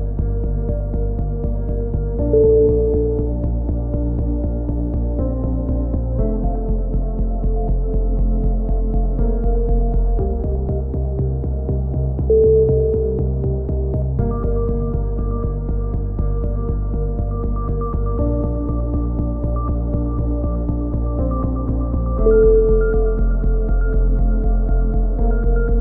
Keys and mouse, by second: 0.3 Tab, 0.3 middle drag, 0.6-1.1 drag, 1.4 KP_1, 2.0 KP_3, 3.0 g, 4.0-4.4 drag, 4.2 g, 7.1 g, 7.8 middle click, 7.9-9.1 drag, 8.9 z, 9.1-9.5 middle drag, 9.1 z, 10.1-10.8 right drag, 10.3 g, 10.8 ctrl+z, 11.1 a, 13.7 KP_3, 14.4 g, 15.4-16.6 middle drag, 16.6 a, 17.0-17.6 middle drag, 17.6 ctrl+r, 19.3 a, 19.3 z, 19.4 middle drag, 19.6-20.2 drag, 22.0 middle click, 22.3 KP_3, 22.5 z, 22.9 g, 24.1 a, 24.2 z, 24.5-25.0 middle drag, 25.3 KP_3.